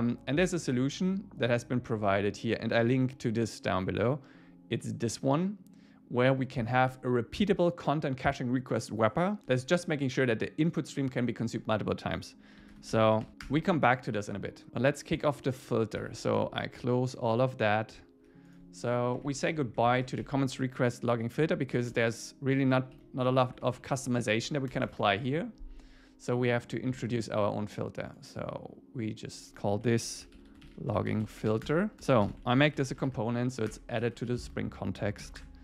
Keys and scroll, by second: 13.4 Return, 16.2 super+w, 19.2 Up, 20.0 super+Right, 20.2 shift+Up, 22.8 Down, 23.3 super+Right, 23.7 shift+Up, 27.0 super+1, 31.7 Return, 32.0 Return, 32.3 alt+l, 33.7 Return, 34.0 Down, 34.3 super+Right, 34.5 Left.